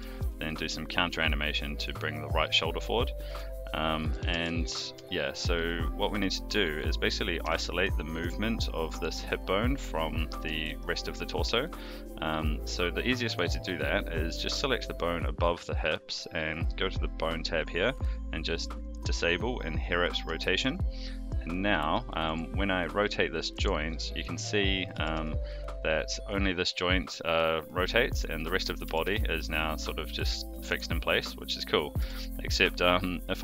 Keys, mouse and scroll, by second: 3.2 a, 4.1 alt+g, 4.3 alt+r, 5.1 shift+middle drag, 5.5-6.2 middle drag, 7.4 KP_3, 8.1 click, 10.5-10.8 shift+middle drag, 11.8 click, 13.2 click, 18.8 click, 20.4 shift+middle drag, 21.2 click, 21.7 middle click, 22.2 r, 23.9-24.2 middle drag, 24.9 r, 28.8 r, 31.2-31.7 middle drag, 32.0 r.